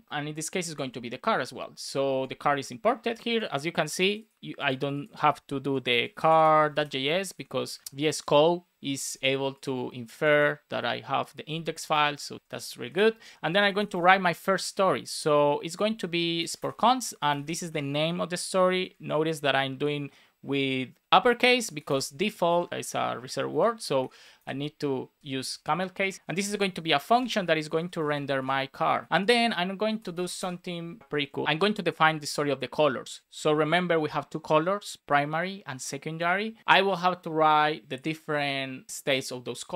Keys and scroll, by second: 0.1 shift+c, 0.7 super+s, 1.1 Up, 6.1 shift+c, 7.1 alt+shift+Left, 12.3 Down, 12.7 Return, 13.9 space, 16.6 space, 17.0 shift+d, 18.8 alt+Left, 19.4 shift+Right, 21.7 BackSpace, 22.4 Left, 22.7 alt+shift+Right, 23.4 Left, 23.7 Right, 23.9-28.3 typing, 25.5 super+Right, 29.0 super+s, 29.2 super+c, 29.2 Right, 29.9 Return, 30.3 super+v, 30.9 alt+Left, 31.5 shift+c, 36.6 super+Right.